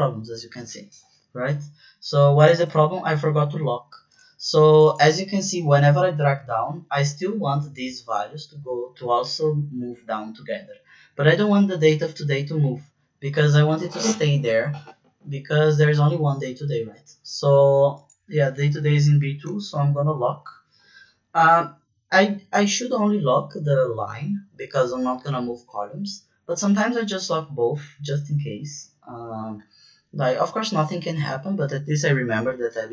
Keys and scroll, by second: 2.5 ctrl+z, 19.7 shift+4, 22.2 Right, 22.6 shift+4.